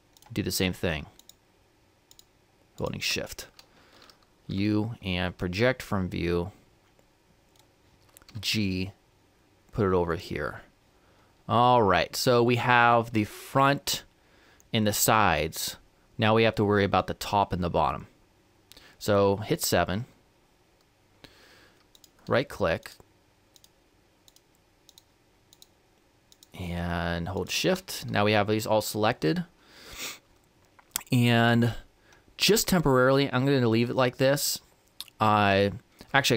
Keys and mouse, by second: 0.2-4.5 right drag, 4.5 u, 8.4 g, 20.0 KP_7, 22.0-29.3 right drag.